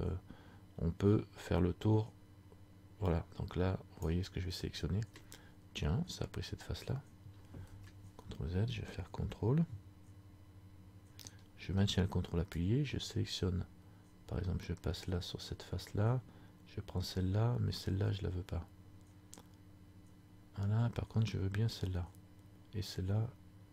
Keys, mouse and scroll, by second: 7.9 ctrl+z, 12.7 ctrl+click.